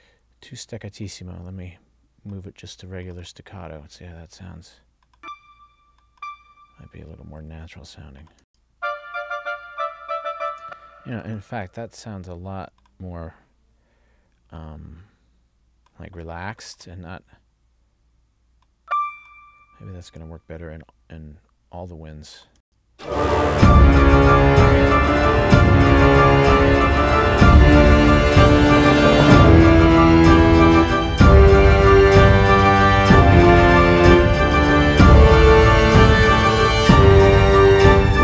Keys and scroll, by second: 8.6 space, 10.6 space, 11.6 space, 22.7 space.